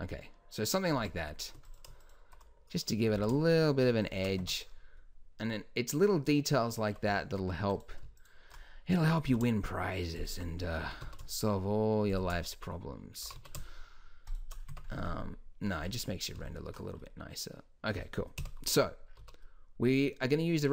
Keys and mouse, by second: 0.9 middle click, 1.0 Tab, 1.7 middle click, 3.1 s, 3.9 click, 4.4 Tab, 7.1 Tab, 8.6 middle click, 8.9 middle click, 9.3 s, 10.8 s, 13.2 g, 14.2 click, 14.7 Tab, 18.4 KP_1, 19.2 z.